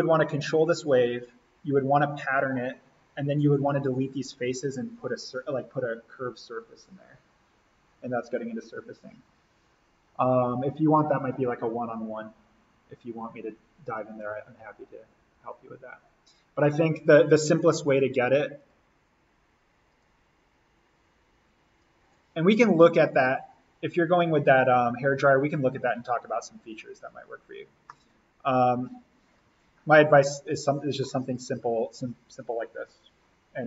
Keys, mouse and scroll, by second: 3.3 click, 18.5 right click, 19.8-25.1 drag, 27.8-33.6 middle drag.